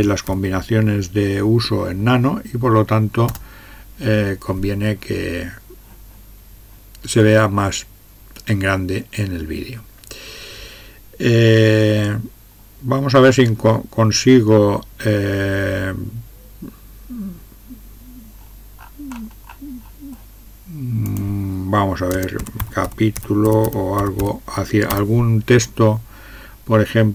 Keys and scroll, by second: 0.0-0.5 typing, 3.3 Return, 22.1-24.7 typing, 24.9 Return, 26.6 typing.